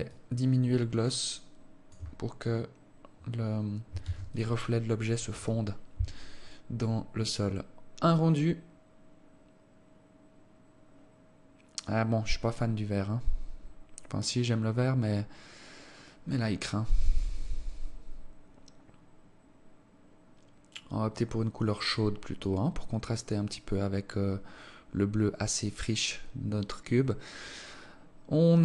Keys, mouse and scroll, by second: 0.6 shift+click, 4.5 ctrl+s.